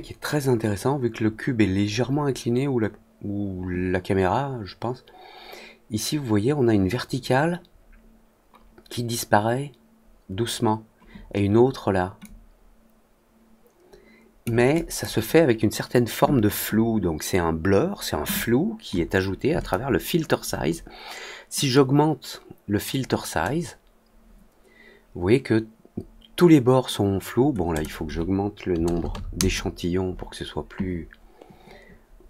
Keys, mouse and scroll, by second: 12.1-14.4 drag, 14.7 click, 19.5 click, 21.7-23.3 drag, 27.7 click.